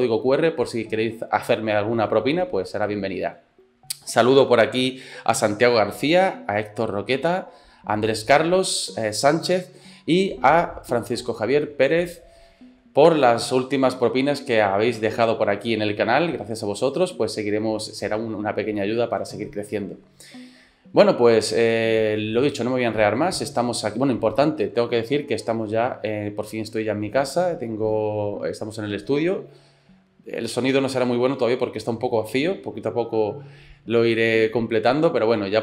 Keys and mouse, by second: 22.6-23.9 shift+middle drag.